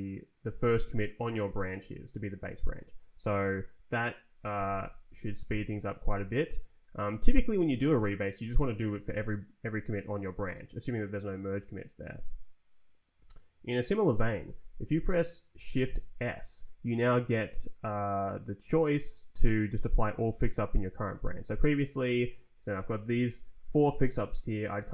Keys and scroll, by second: 4.7 Escape, 5.5 Return, 15.8 shift+s, 16.9 Down, 17.3 Up, 17.7 Down, 18.1 Up, 21.2 Escape, 21.7 Down, 22.4 Up, 23.0 Down.